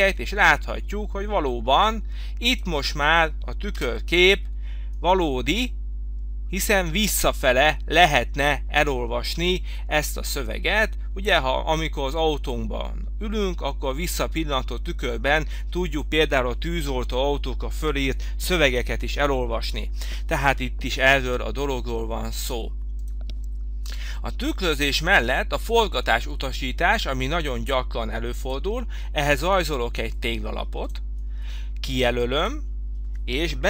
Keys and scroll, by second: 4.0 Return, 23.9 Delete.